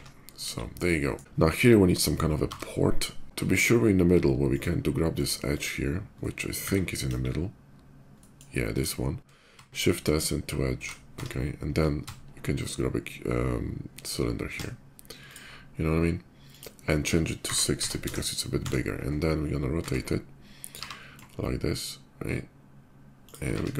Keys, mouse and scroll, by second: 0.4 KP_5, 0.6 middle drag, 1.3 click, 2.1 d, 2.9 click, 3.2 Tab, 3.4 right click, 4.2 click, 5.2 click, 5.8 middle click, 6.8 KP_5, 7.9 middle click, 8.5 click, 9.2 shift+s, 9.8 shift+s, 10.2 shift+s, 10.9 Tab, 11.8 shift+a, 13.0 shift+a, 15.0 click, 16.2 click, 17.2 6, 17.8 Return, 17.8 6, 17.8 0, 18.3 `, 18.5 right click, 18.7 middle click, 20.6 r, 23.0 ctrl+click, 23.3 q, 23.5 click.